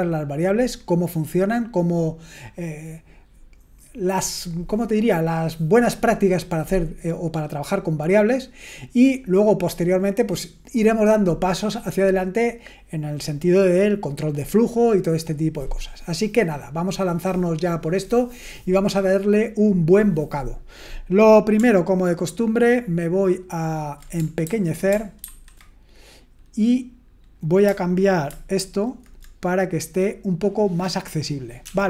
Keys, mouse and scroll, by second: 24.4 super+h, 25.2 ctrl+1, 28.6 shift+super+h, 31.6 BackSpace.